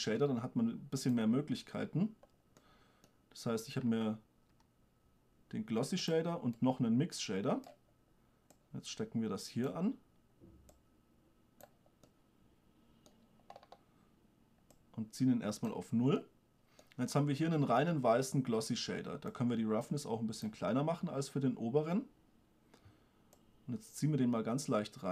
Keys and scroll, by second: 0.3 shift+d, 4.9 g.